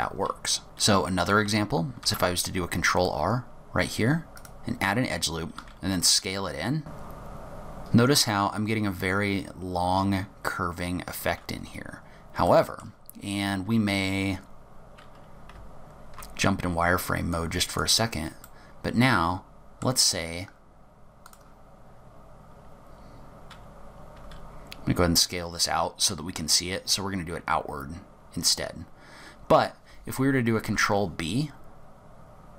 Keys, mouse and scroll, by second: 0.6-1.6 scroll up 1, 1.6-2.1 scroll up 1, 2.1 ctrl+r, 5.7 s, 11.7-12.6 scroll up 4, 12.6 middle click, 15.6 z, 17.4 click, 18.5 middle click, 21.4 click, 24.2 s, 30.7 ctrl+b.